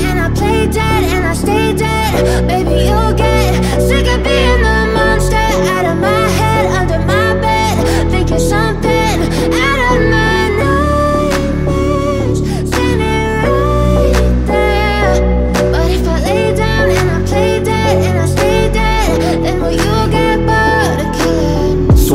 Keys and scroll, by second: 0.7 ctrl+z, 1.2 Escape, 2.5 ctrl+z, 2.8 Escape, 3.2 F2, 8.7 c, 9.1 F3, 9.2 Escape, 9.6 F2, 17.2 shift+Page_Up.